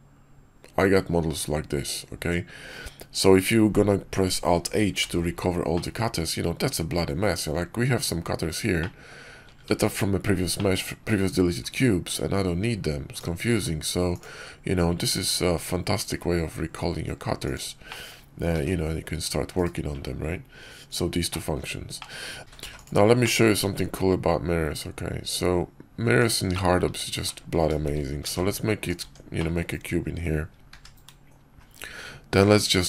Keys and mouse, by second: 4.9 alt+h, 5.6-7.4 drag, 8.7-9.0 drag, 9.6 ctrl+z, 10.4-10.7 drag, 13.4 q, 17.8 click, 18.4 r, 21.2 drag, 21.9 click, 22.4 ctrl+z, 22.4 a, 22.5 x, 23.1 click, 23.7 shift+a, 26.4 drag, 27.4 ctrl+Tab, 28.1 ctrl+shift+b, 28.9 Tab, 29.3 click, 30.6 q.